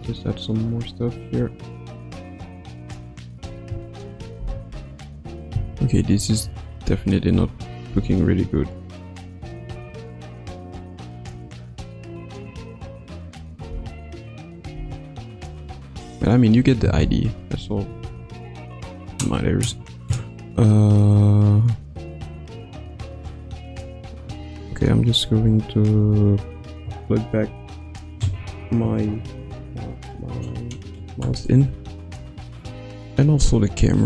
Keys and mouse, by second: 4.4 Left, 4.7 Right, 5.5 Left, 5.9 Right, 6.7 click, 7.3 space, 7.8 space, 8.4-11.1 drag, 12.1-13.6 drag, 13.7 space, 14.7 space, 15.3-16.5 drag, 17.0 i, 18.0 ctrl+s.